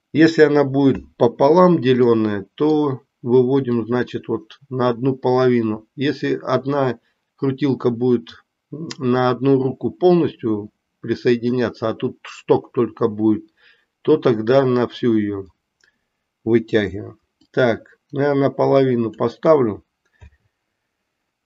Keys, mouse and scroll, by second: 2.1 middle click, 3.8-11.5 drag, 17.4-19.2 drag.